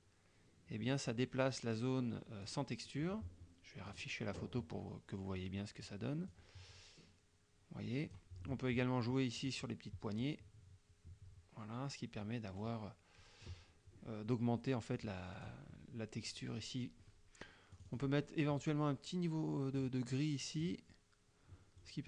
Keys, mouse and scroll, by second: 3.9 click, 5.4 click, 6.3-8.4 drag, 9.5-13.7 drag, 15.0 click, 17.8 click, 20.7 click.